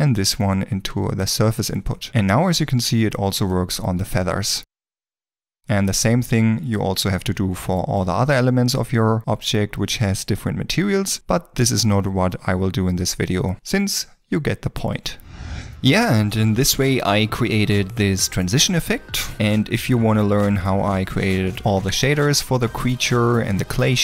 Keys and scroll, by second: 1.8 ctrl+s, 1.8 ctrl+space, 3.8 g, 8.5 g, 11.2 g.